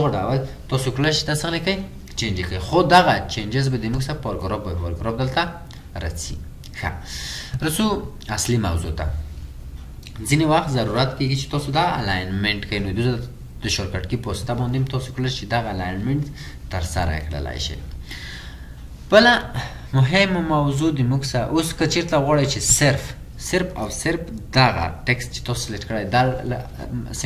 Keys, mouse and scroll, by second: 9.1 scroll up 1, 12.1-13.5 scroll down 1, 17.1-18.1 scroll up 1, 20.3-21.1 scroll down 1, 21.1-23.4 scroll up 1.